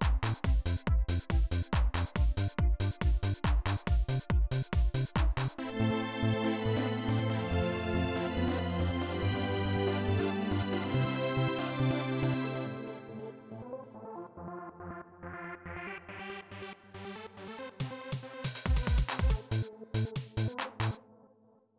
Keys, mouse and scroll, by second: 2.0 click, 5.6 click, 13.9 click, 15.1 click, 17.7 click, 20.7 space.